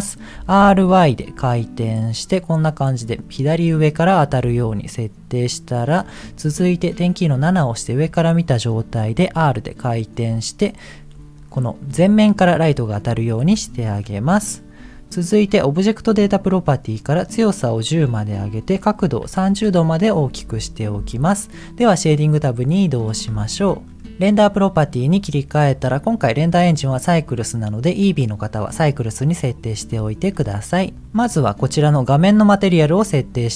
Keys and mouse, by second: 0.3 r, 4.5 g, 7.4 KP_7, 9.2 r, 14.2 KP_1, 16.0 click, 16.9 click, 17.9-19.6 drag, 23.4 middle click, 26.7-28.7 drag, 30.2 middle click, 31.1 middle click.